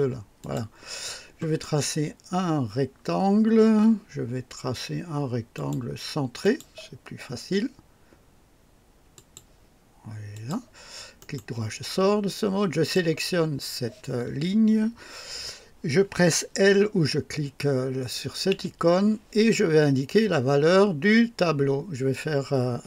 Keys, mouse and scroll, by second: 0.4 click, 5.5 click, 6.4 click, 9.1 click, 10.3 click, 11.2 right click, 12.7 click, 18.5 l.